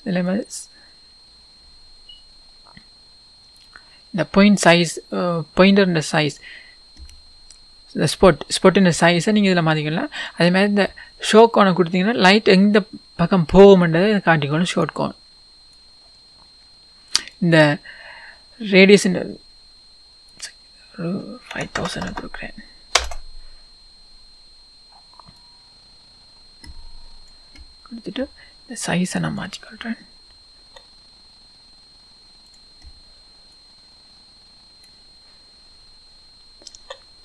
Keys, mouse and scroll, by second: 1.3-10.3 drag, 7.2 scroll up 1, 8.0-8.9 scroll down 1, 10.9-12.3 scroll down 1, 14.7 click, 15.9-29.4 drag, 17.9 scroll up 1, 18.7-19.2 scroll down 1, 23.0 KP_0, 23.1 Return, 28.4-29.4 scroll down 1, 30.6 s, 32.5 click, 33.5 click, 35.3-35.7 scroll up 1, 36.7 s.